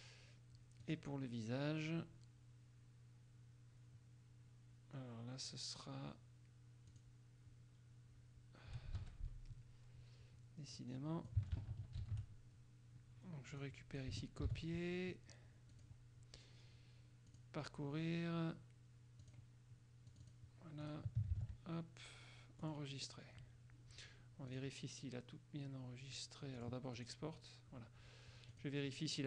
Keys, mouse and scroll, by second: 1.0 click, 7.1 click, 9.1 Escape, 10.9 click, 12.2 ctrl+shift+x, 13.7 click, 14.6 ctrl+c, 15.9 click, 17.5 click, 19.3 click, 20.3 click, 21.0 click, 21.5 ctrl+v, 22.7 click, 24.7 click, 26.7 click, 27.1 click, 28.7 click.